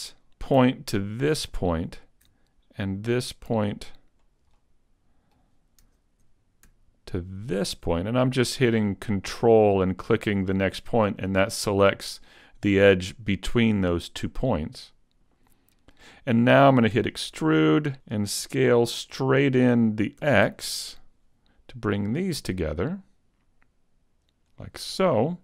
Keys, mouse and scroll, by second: 1.3 ctrl+right click, 2.8 shift+right click, 4.2 scroll up 1, 4.5 middle click, 7.6 ctrl+right click, 7.9 middle click, 14.4 middle click, 16.9 e, 17.4 click, 17.9 super+z, 20.2 e, 20.5 s, 24.7 click, 25.1-25.4 scroll up 2.